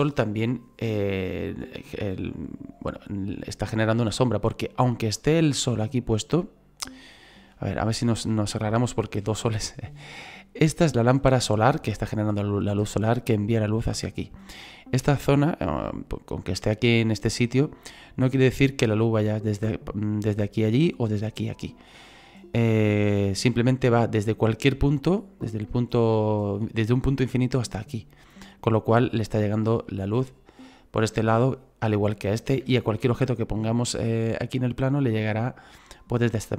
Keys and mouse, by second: 23.1 shift+middle click, 25.7 shift+middle click, 32.7 shift+middle click.